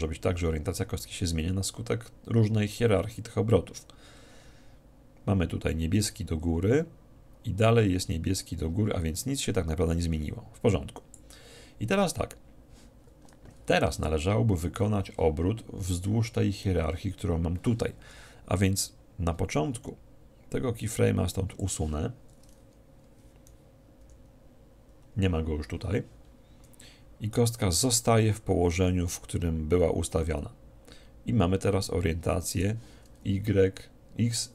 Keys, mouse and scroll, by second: 19.6-21.8 drag, 24.0 alt+i, 26.8-28.6 drag.